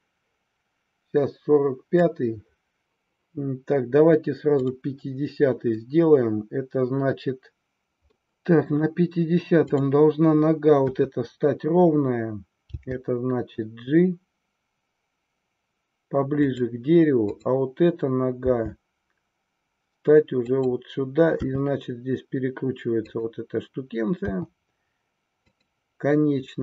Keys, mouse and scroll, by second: 4.6 click, 5.8-7.8 middle drag, 7.8 KP_3, 8.2-8.8 middle drag, 10.9 KP_3, 12.8 g, 16.5 click, 17.4-18.6 drag, 18.6 g, 20.5 click, 21.5 r, 24.3 g, 25.5 click.